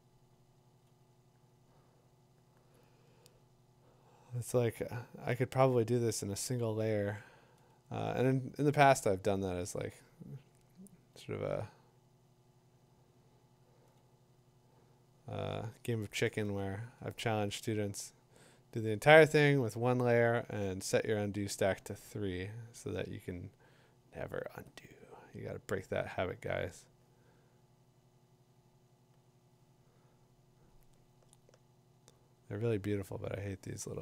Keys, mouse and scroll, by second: 6.3 click, 8.7 click, 9.7 click, 12.6 click, 12.6 [, 13.6 [, 16.2 ], 16.6 ], 19.9 ], 21.5 [, 21.8 [, 24.5 click, 24.9 typing, 31.2 click, 31.2 =.